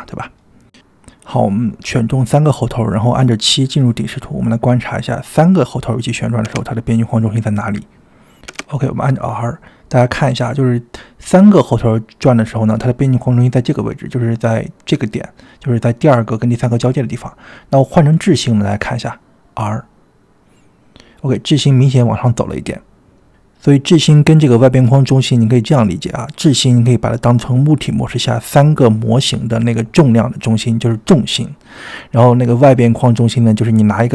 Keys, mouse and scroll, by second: 1.1-2.4 middle drag, 2.4-3.3 drag, 3.9 click, 4.1-4.6 middle drag, 6.2 KP_7, 8.8 r, 16.1-17.1 drag, 19.5 r, 22.6 r.